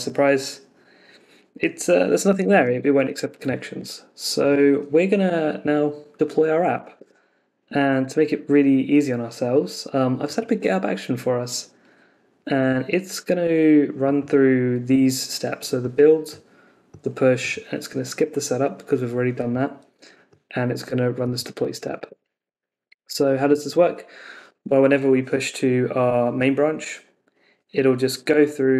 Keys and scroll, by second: 6.9 super+Tab, 22.1 super+Tab.